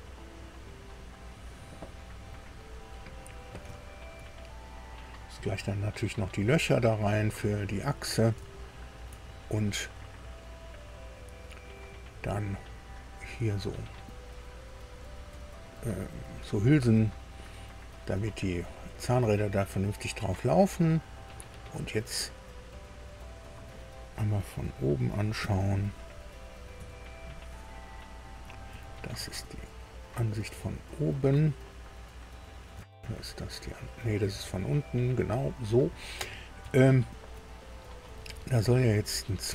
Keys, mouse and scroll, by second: 0.9 click, 1.8 click, 2.6 scroll down 1, 3.1 click, 3.7 shift+click, 4.3-5.6 shift+drag, 6.0 scroll up 2, 6.5 scroll up 2, 7.3 click, 8.4 shift+click, 9.5-11.8 drag, 22.2-23.5 drag, 25.3 KP_3, 26.7 KP_6, 28.6 KP_4, 32.7 KP_1, 34.2 KP_4, 36.7 shift+middle click.